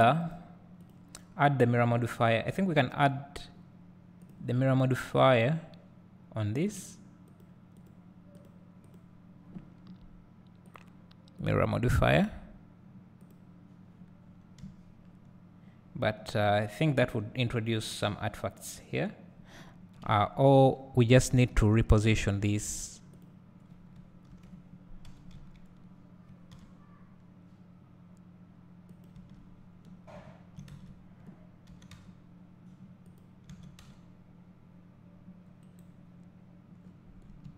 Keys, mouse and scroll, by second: 0.2 click, 0.8 click, 2.6 scroll up 1, 4.7-7.6 drag, 13.4-23.2 drag, 14.3 scroll down 2, 14.8 `, 20.0 KP_Decimal, 21.1 scroll up 1, 21.9 `, 22.4 Tab, 24.6 ctrl+l, 25.3 g, 29.1 click, 29.9-30.7 scroll down 2, 30.7 `, 30.9 Tab, 31.9 g, 33.7 s, 35.9 right click, 36.8 scroll down 2.